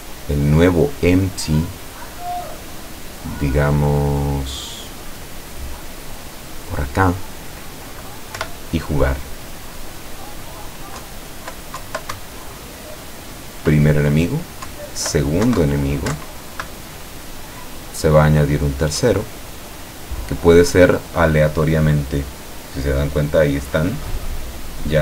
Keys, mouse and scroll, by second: 1.5-3.0 drag, 3.6-5.3 drag, 5.9-7.4 drag, 8.4 p, 11.1 Down, 12.3 Up, 14.8 Down, 15.6 Right, 15.7 Down, 16.2 Right.